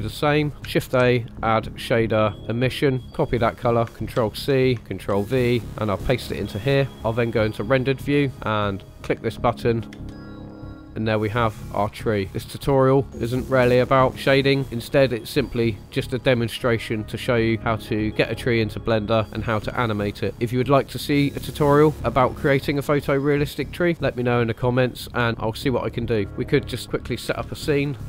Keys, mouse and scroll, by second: 0.2 click, 0.8 shift+a, 4.1 ctrl+c, 5.1 ctrl+v, 5.6-6.8 drag, 8.3 click, 8.9 click, 9.7 scroll down 1, 10.0 space, 14.6 shift+middle click, 15.1 click, 16.2 scroll up 1, 26.2 scroll down 2, 26.8 click, 27.5 space.